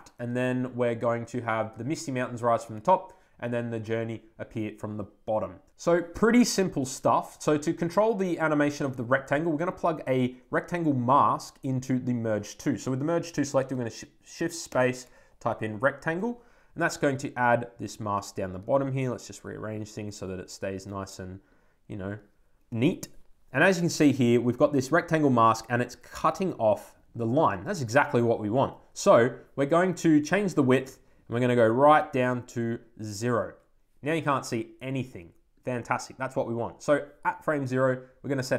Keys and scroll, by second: 15.9 Return.